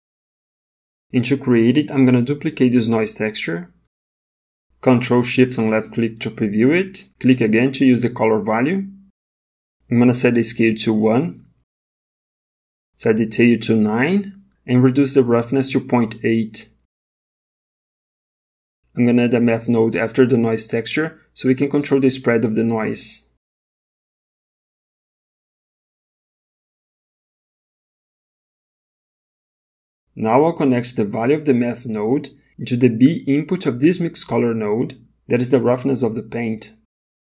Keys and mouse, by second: 0.0 middle click, 1.5 click, 3.0 ctrl+shift+d, 6.0 ctrl+shift+click, 7.1 ctrl+shift+click, 9.4-10.5 drag, 12.0-13.4 drag, 15.5-17.0 drag, 18.7 shift+a, 27.2-29.6 drag, 31.0 middle click, 33.4-34.8 drag, 36.4 middle click.